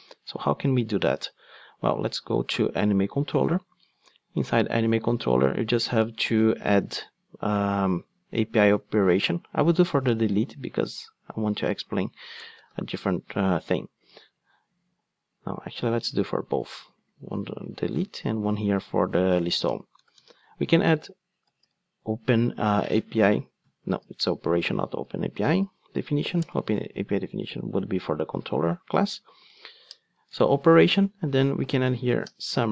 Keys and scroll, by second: 17.3 super+x, 26.5 Return, 32.3 Return.